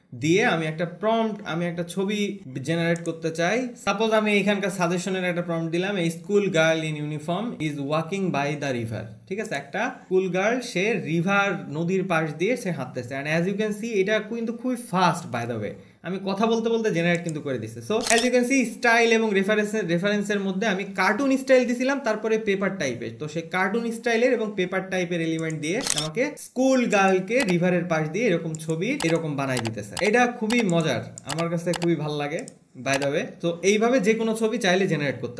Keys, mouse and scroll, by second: 3.4 click, 17.6 click.